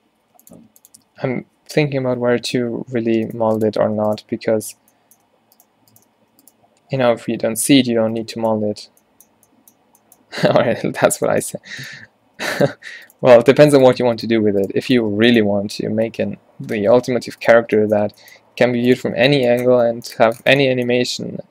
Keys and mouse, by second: 0.3 r, 0.7 s, 2.8 alt+w, 3.4 g, 6.3 f, 7.3 ctrl+z, 7.5 ctrl+z, 8.2 z, 9.0 n, 10.3 n, 10.9 n, 11.1 b, 11.9-15.7 drag, 12.3 g, 12.8 f, 13.4 z, 15.1 b, 16.1 f, 16.5 z, 17.0 Tab, 17.3 Tab, 17.7 q, 18.1 q, 18.5 g, 19.1 Tab.